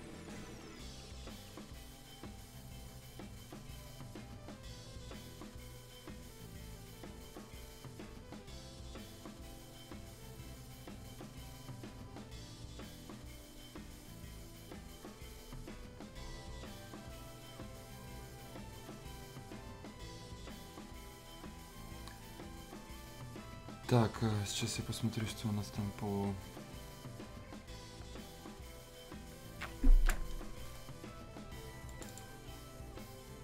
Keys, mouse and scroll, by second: 25.3 super+Num_Lock, 28.3 super+Num_Lock, 30.6 ctrl+alt+Delete.